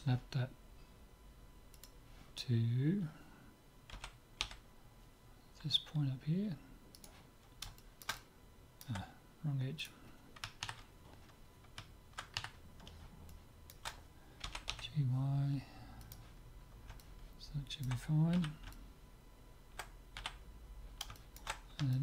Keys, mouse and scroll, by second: 1.7-3.5 drag, 3.9 g, 7.8-10.1 middle drag, 9.8-11.6 right drag, 12.4 KP_3, 13.3-15.3 middle drag, 14.4 g, 16.6-20.5 middle drag, 18.4 z, 20.2 z, 21.1-22.0 middle drag.